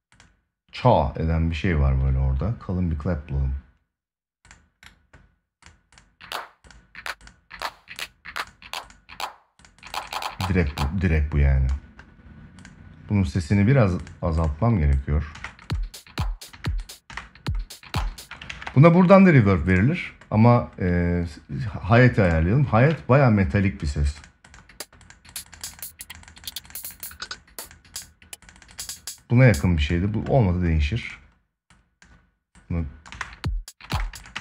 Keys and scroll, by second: 15.0 space, 18.2 ctrl+s, 32.8 space, 34.1 space.